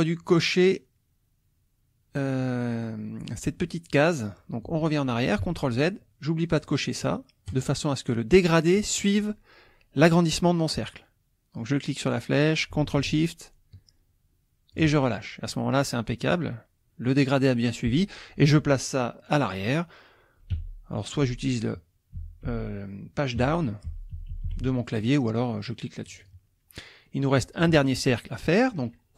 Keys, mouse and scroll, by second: 5.4 ctrl+z, 7.5 click, 11.6-14.9 drag, 20.5 Page_Down, 21.3 Page_Down, 22.2 Page_Up, 22.4 Page_Down, 23.4 Page_Up, 23.9 Page_Down, 26.0 click, 27.0 click.